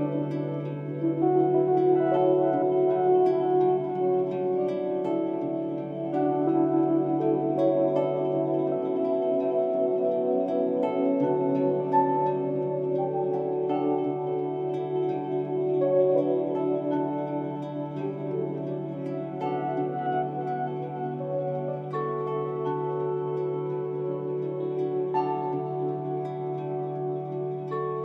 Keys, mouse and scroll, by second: 2.5-4.1 right drag, 4.4 scroll down 3, 4.6-5.4 middle drag, 5.4 scroll up 4, 11.4-11.8 scroll down 2, 11.8-13.4 middle drag, 23.3 s.